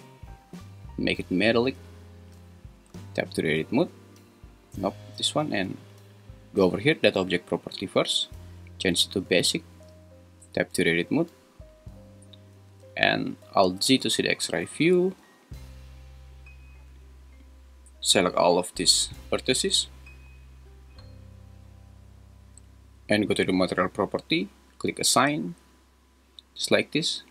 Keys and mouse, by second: 0.6-1.8 drag, 2.9 Tab, 4.7 Tab, 7.3 click, 8.7-10.0 drag, 10.0 Tab, 12.9 `, 13.8 alt+z, 16.0 click, 16.9 click, 17.2-19.1 drag, 23.7 click.